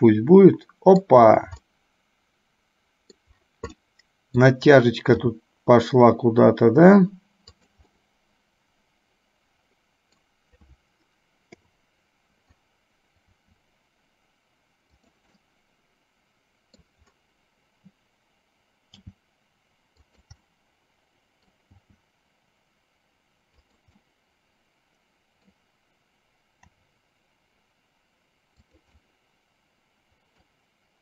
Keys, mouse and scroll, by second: 0.1-1.2 middle drag, 1.9-3.5 middle drag, 4.0 middle click, 5.4 g, 8.1-10.4 middle drag, 11.6 KP_7, 15.6-17.0 middle drag, 19.2 g, 20.6-21.7 middle drag, 24.2-25.7 middle drag, 26.7 r, 29.1-30.6 middle drag.